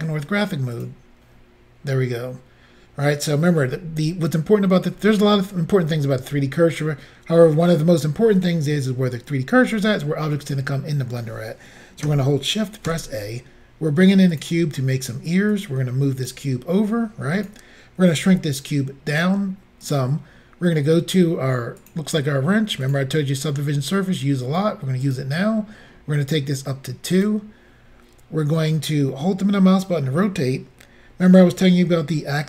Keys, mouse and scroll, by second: 0.8 click, 12.9 a, 14.4 click, 15.6 click, 17.0 click, 18.3 s, 19.9 click, 21.8 click, 22.9 click, 25.1 click, 27.2 click, 29.1 middle click.